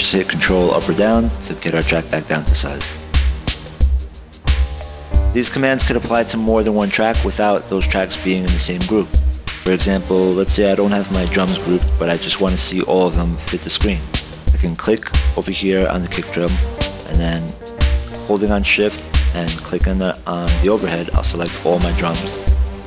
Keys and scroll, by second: 1.0 ctrl+Down, 1.3 ctrl+Down, 1.5 ctrl+Down, 2.1 ctrl+Down.